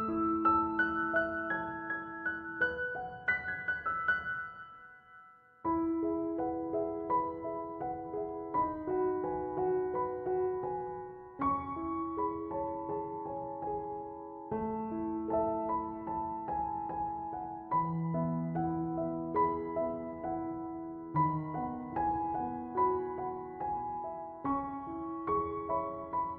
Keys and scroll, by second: 5.9 Escape, 14.6 Escape, 23.8 3, 24.0 Return, 25.6 Escape.